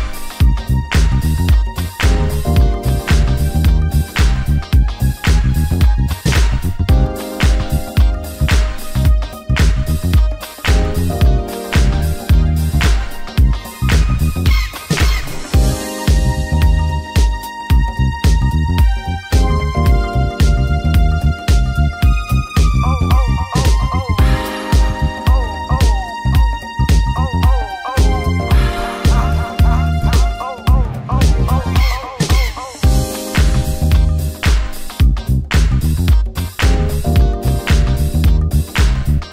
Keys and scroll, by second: 11.4 shift+F5, 13.1 ctrl+d.